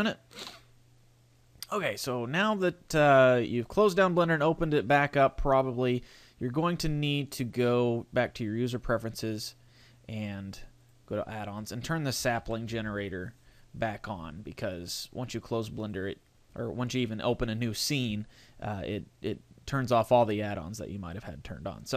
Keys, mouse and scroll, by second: 0.0 scroll up 1, 0.1 click, 1.5 click, 6.6 click.